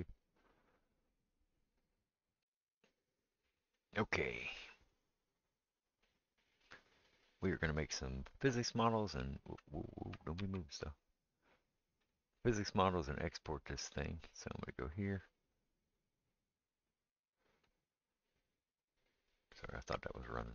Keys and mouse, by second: 8.5 s, 13.7-16.4 middle drag, 16.4-20.5 drag.